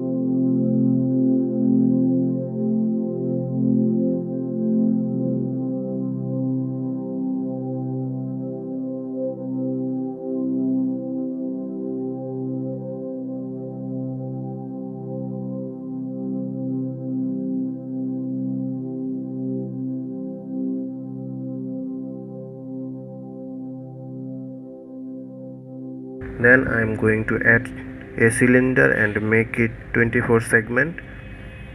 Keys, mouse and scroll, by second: 24.5-25.2 scroll down 2, 25.2-26.7 scroll up 2, 27.2 shift+a.